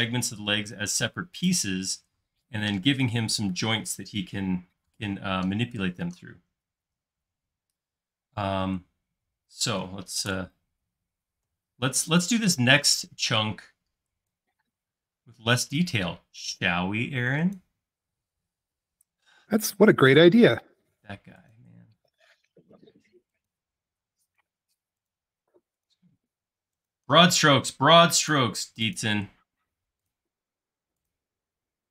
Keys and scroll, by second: 11.5 typing, 12.6 typing, 18.0 i.